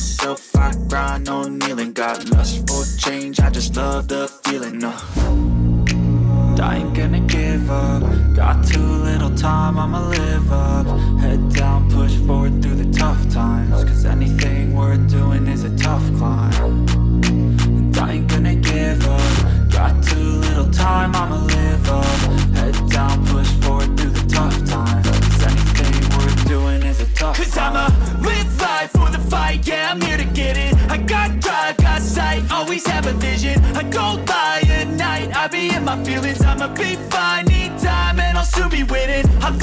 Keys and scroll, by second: 22.1 space, 26.2 ctrl+z.